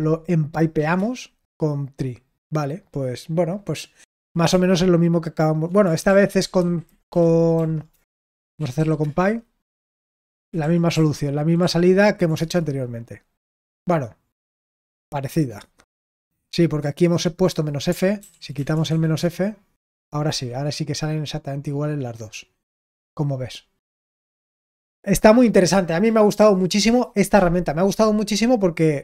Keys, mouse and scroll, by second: 14.3-15.4 scroll up 2, 15.4-17.9 scroll down 2, 20.4-21.6 scroll up 2, 21.6-23.7 scroll down 3, 23.7 scroll down 1, 25.4-29.0 scroll down 1.